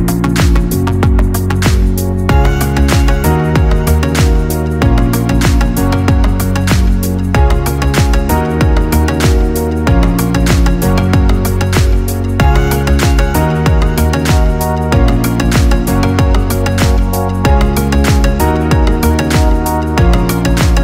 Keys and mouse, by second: 3.3 click, 4.0-6.7 middle drag, 6.7 click, 7.3-9.3 ctrl+middle drag, 9.3 shift+d, 12.9 g, 15.9-19.1 ctrl+middle drag, 19.1 g.